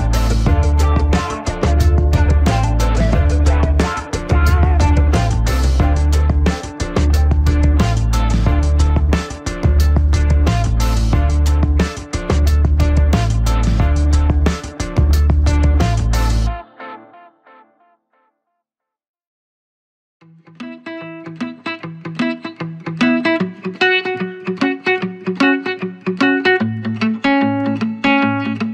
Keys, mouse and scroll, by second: 0.2 click, 3.9 ctrl+=, 4.6 ctrl+-, 6.5 space, 6.9 click, 7.0 space, 7.7 click, 7.8 space, 8.9 ctrl+=, 10.2 scroll up 1, 13.0 right click, 14.1 click, 16.4 click, 17.3-21.0 typing, 19.0 scroll up 1, 21.8 click, 23.9 scroll down 1, 27.8 scroll down 1, 28.6 ctrl+j.